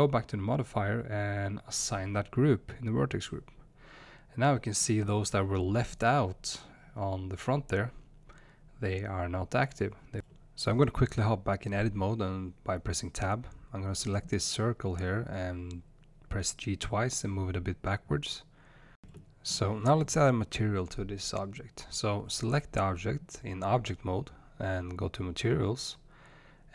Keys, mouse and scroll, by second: 3.0-5.4 scroll down 1, 5.4 space, 8.9 click, 10.6 g, 14.5 click, 14.8 space, 15.9 Tab, 16.4 space, 17.3 click, 17.3 space, 18.9 click, 21.0 click, 22.3 click, 23.8 click, 26.2-26.7 drag.